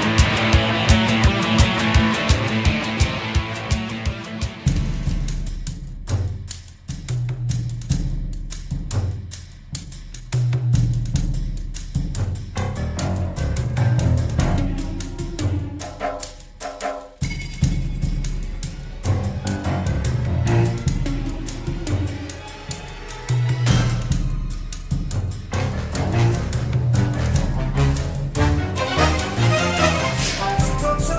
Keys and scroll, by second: 10.8 ctrl+Left, 17.0 -, 18.6 ctrl+g, 19.4 Insert, 19.8 v, 20.6 w, 21.5 KP_0, 21.7 Tab, 21.9 Return, 24.3 space, 30.4-31.1 typing.